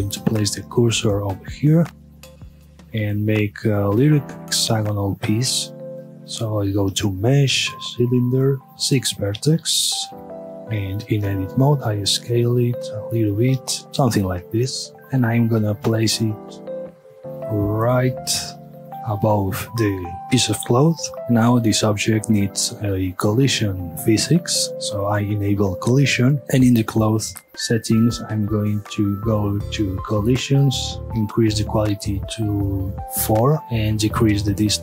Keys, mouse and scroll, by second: 0.5 shift+right click, 1.1-2.6 middle drag, 2.6 shift+a, 8.6 click, 9.5 KP_Enter, 10.1 Tab, 11.3 s, 13.1 click, 13.3 s, 13.9 g, 15.0 middle drag, 15.2 g, 18.9 shift+click, 19.1-19.6 middle drag, 19.6 scroll down 1, 20.0-21.6 middle drag, 22.4 click, 23.8 scroll up 1, 23.9-26.4 drag, 27.3 scroll down 1, 30.4-33.1 drag, 33.1 KP_Enter, 34.1-34.8 drag.